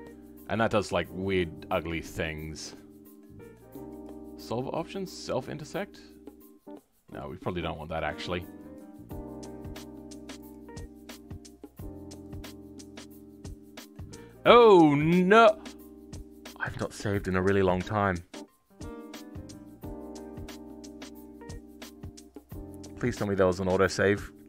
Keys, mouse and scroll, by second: 1.0-3.8 scroll up 2, 3.8-6.1 drag.